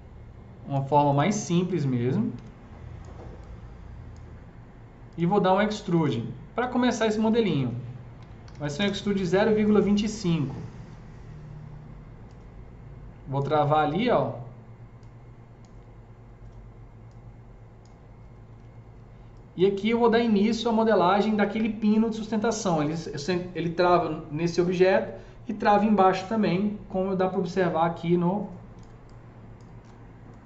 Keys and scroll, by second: 2.4 s, 8.2-10.4 typing, 8.7 Return, 13.6 z.